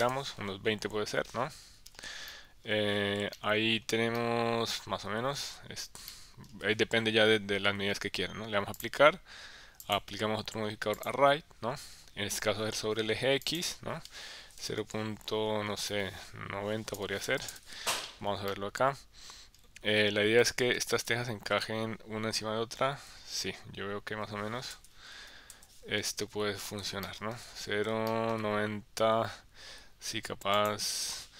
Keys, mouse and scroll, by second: 2.3 middle click, 3.3 shift+middle click, 4.2 middle click, 6.1 shift+middle click, 8.8 click, 9.8-11.1 drag, 13.4-18.0 drag, 18.5 middle click, 21.0-23.1 middle drag, 24.7 KP_1, 25.1 KP_3, 25.5 KP_1, 27.0 shift+middle click, 28.1 shift+middle click, 30.6-31.3 drag.